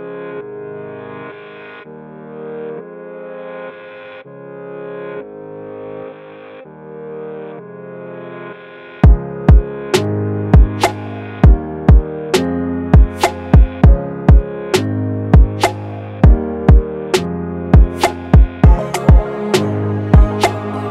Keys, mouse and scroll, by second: 1.7 click, 5.6-7.8 drag, 11.1 click, 14.4 click, 16.8-17.7 drag, 18.8 8, 20.1-20.7 click.